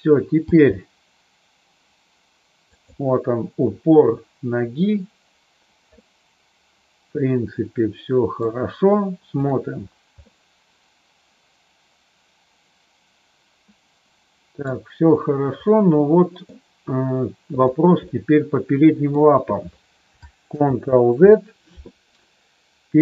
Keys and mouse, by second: 0.4 g, 2.7 click, 5.9-8.3 middle drag, 9.3 click, 10.2-14.7 middle drag, 15.7 middle click, 17.5 click, 18.0-19.0 middle drag, 20.5 ctrl+z, 22.2-23.0 middle drag.